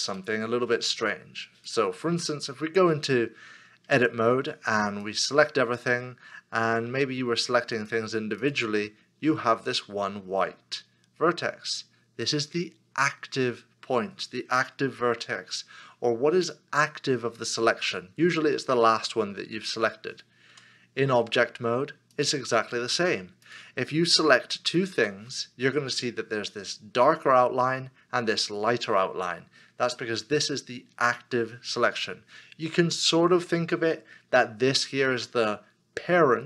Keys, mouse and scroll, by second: 0.2 shift+middle click, 3.9 Tab, 6.9 Tab, 7.7 shift+l, 20.6 Tab, 24.8 shift+click.